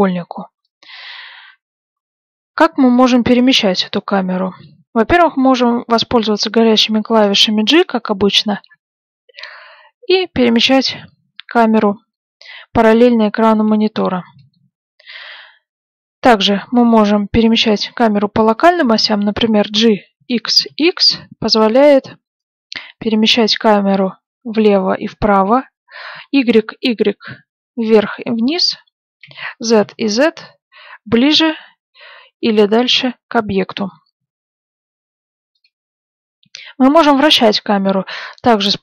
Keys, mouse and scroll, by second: 8.6 g, 19.7 g.